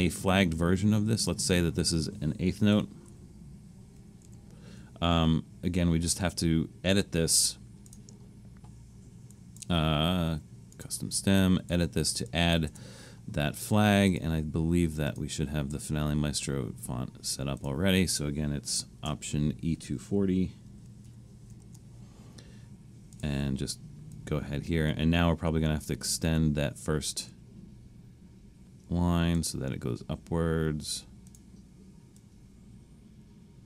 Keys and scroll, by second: 2.7-4.2 typing, 12.7 Return, 20.7 alt+e, 20.9 alt+2, 21.1 alt+4, 21.5 alt+0.